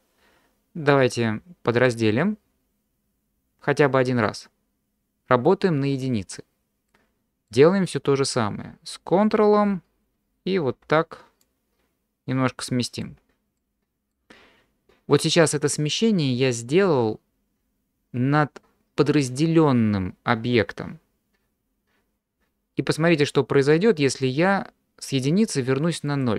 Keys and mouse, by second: 1.8 click, 6.9 middle click, 11.4-13.0 ctrl+drag, 13.6 middle click, 26.1 click.